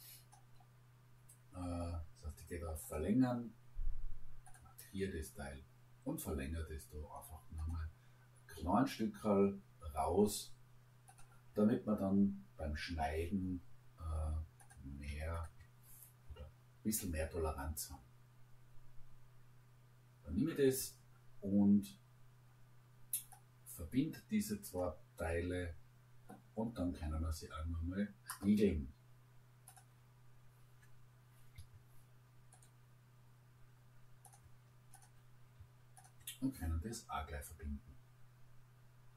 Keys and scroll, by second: 31.6 Escape.